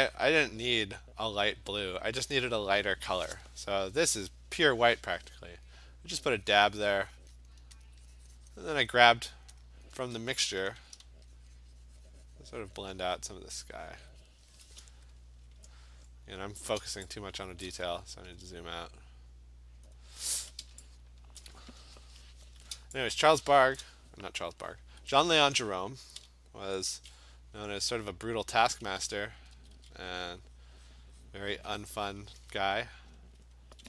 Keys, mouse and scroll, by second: 0.0 click, 0.1 click, 0.6 click, 0.6 alt+click, 0.8 click, 6.2 click, 6.6 click, 7.2 click, 7.3 click, 7.5 click, 7.9 alt+click, 8.4 click, 8.5 click, 8.6 click, 8.8 click, 9.1 click, 9.2 click, 9.6 alt+click, 10.3 click, 10.6 ], 10.8 ], 11.0 ], 11.6 click, 12.7 click, 13.3 click, 13.6 [, 14.0 click, 14.1 click, 15.0-16.9 scroll, 16.9 v, 17.7 click, 17.9 scroll down 14, 18.2 scroll, 18.8-19.8 scroll, 19.8-20.5 scroll, 21.4 click, 21.9-22.6 scroll, 23.0 scroll, 23.8 click, 26.8 b, 28.7 alt+click, 29.6 [, 29.8 [, 30.0 [, 30.3 [, 30.6 click, 31.0 click, 31.1 alt+click, 31.3 click, 31.7 click, 31.8 alt+click, 32.2 click, 33.3 alt+click.